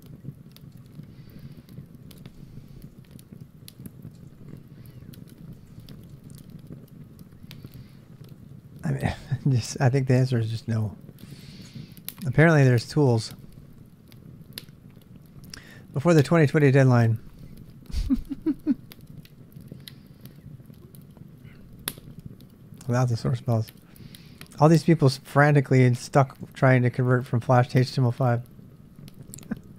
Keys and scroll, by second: 1.8-8.2 typing, 10.4-11.1 typing.